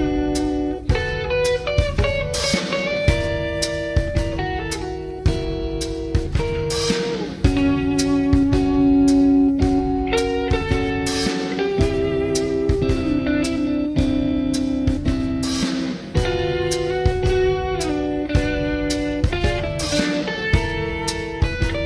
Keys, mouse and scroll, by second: 0.8 click, 2.2 g, 5.0 click, 5.5-9.4 middle drag, 9.7-11.3 middle drag, 11.6 middle click, 11.9 scroll down 1, 15.9 click, 16.7 middle click, 18.3 click.